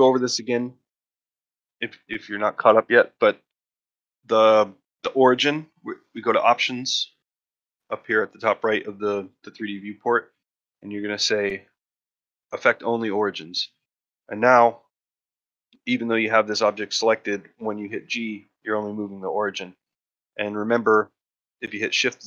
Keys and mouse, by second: 1.6 ctrl+middle click, 13.9 middle click, 14.7 middle drag, 15.5 click, 19.1 g.